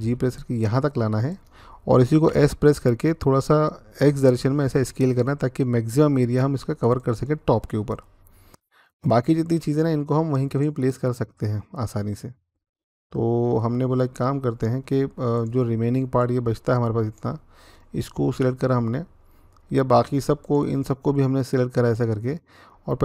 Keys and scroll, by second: 2.1 s, 3.8 x, 22.9 s.